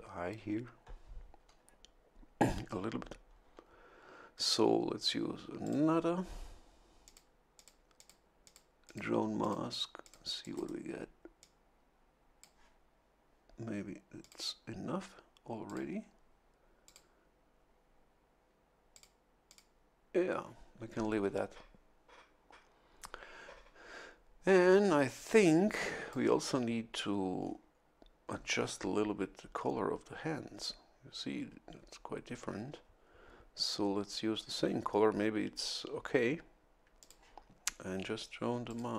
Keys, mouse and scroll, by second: 5.6 click, 7.0 click, 7.5 click, 7.9 click, 8.4 click, 8.8 click, 9.4 click, 10.4 click, 11.4-12.7 drag, 14.2 click, 15.6 click, 16.8 click, 18.9 click, 19.4 click, 25.3 a, 25.4 click, 27.4 scroll down 2, 28.3-28.8 scroll down 2, 37.0 click, 38.6 click.